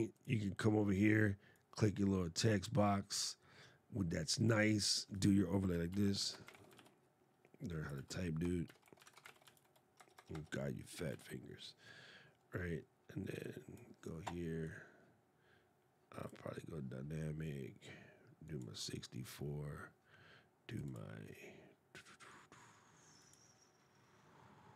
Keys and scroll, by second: 5.7 shift+d, 6.2 shift+r, 7.7 super+a, 8.4 shift+d, 9.0 shift+o.